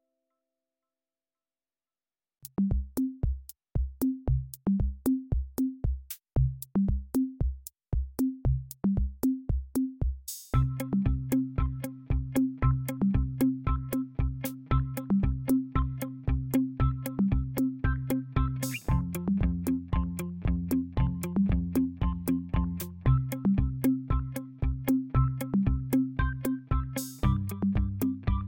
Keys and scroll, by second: 21.3 ctrl+a, 26.5 ctrl+a, 26.6-28.4 typing.